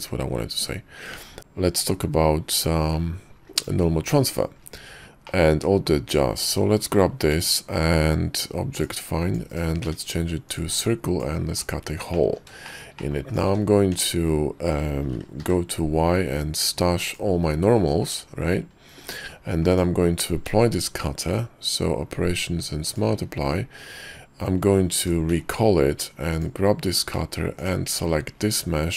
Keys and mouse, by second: 1.4 Tab, 1.4 x, 1.4 shift+a, 3.7 right click, 5.4-6.0 middle drag, 7.3 shift+v, 9.0-9.7 drag, 9.9 d, 10.9-11.9 drag, 12.2 drag, 12.8 shift+middle click, 13.1 click, 13.4 click, 13.6 q, 14.0 Tab, 15.5 y, 18.2 click, 19.1 Tab, 19.8 click, 20.5 q, 25.4 alt+h, 26.4 click, 27.7 shift+click.